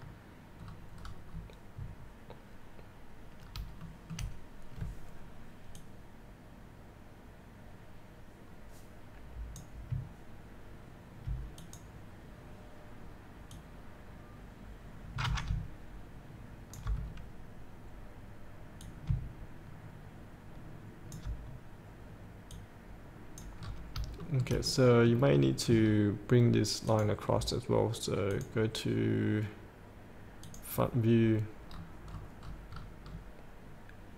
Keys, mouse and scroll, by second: 0.1 click, 0.8-3.8 scroll down 1, 4.1 middle click, 4.1 shift+scroll up 1, 6.0-9.9 drag, 11.8-17.2 drag, 17.2-19.0 scroll down 1, 19.0-22.3 drag, 22.7 click, 23.8 scroll up 1, 24.5 shift+middle click, 24.9 middle click, 25.7 scroll down 1, 27.0 click, 31.9-33.0 scroll down 1.